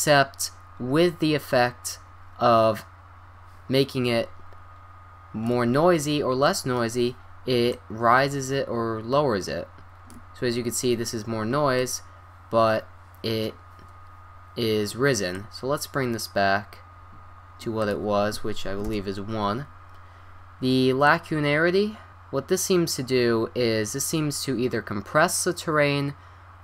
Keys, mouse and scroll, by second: 6.0 middle click, 6.6 middle click, 7.7-9.5 drag, 10.8-12.2 middle drag, 15.3-17.2 drag, 17.8-19.2 drag, 20.2-20.6 scroll down 1, 21.1-22.1 drag.